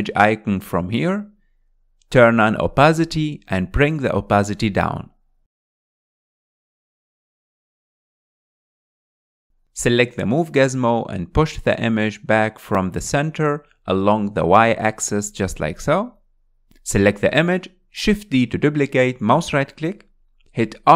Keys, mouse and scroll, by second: 0.7 KP_1, 3.3 drag, 5.3 click, 6.0-8.7 drag, 8.7 scroll up 4, 9.4-11.5 shift+middle drag, 11.5-13.0 drag, 15.0-17.4 middle drag, 17.4 shift+d.